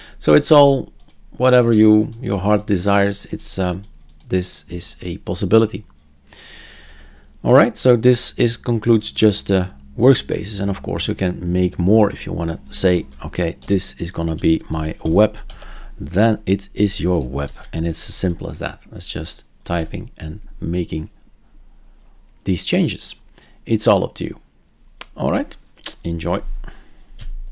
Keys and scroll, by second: 13.6-16.0 typing, 17.4 ctrl+s, 19.6 alt+r.